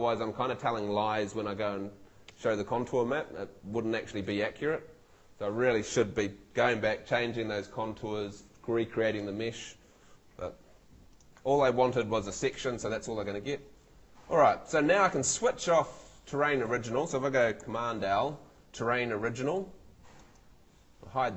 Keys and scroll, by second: 17.4 super+z, 17.6 super+l.